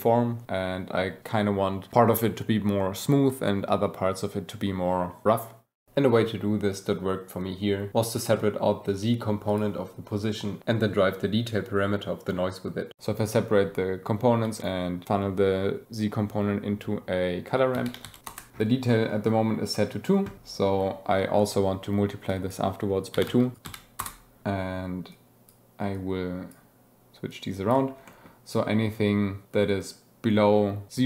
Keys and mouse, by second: 7.5 click, 8.1 click, 8.5 shift+d, 9.5 click, 10.0-10.6 drag, 12.9 g, 13.5 click, 14.3-14.6 drag, 18.5 g, 18.9 click, 22.3 click, 23.5 Down, 25.1 click, 25.9-26.6 drag, 27.4 click, 28.1 click.